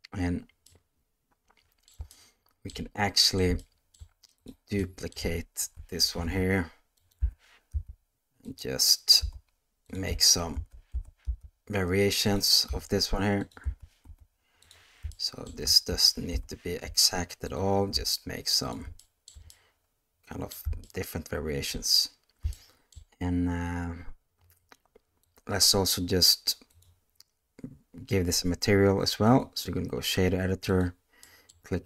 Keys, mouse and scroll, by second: 0.7-1.9 middle drag, 2.1-2.7 shift+middle drag, 3.0-3.4 middle drag, 3.6-3.9 shift+middle drag, 4.4 click, 4.8 middle click, 5.6 shift+d, 7.2 g, 9.2 s, 10.5 shift+d, 12.6 s, 13.6 s, 15.1-15.4 shift+middle drag, 15.9 shift+d, 17.9 s, 19.0 shift+middle drag, 19.5-20.5 middle drag, 20.8-21.6 shift+middle drag, 22.5-22.9 shift+middle drag, 25.2 click, 26.9-29.6 drag, 30.7 click, 31.3 middle click.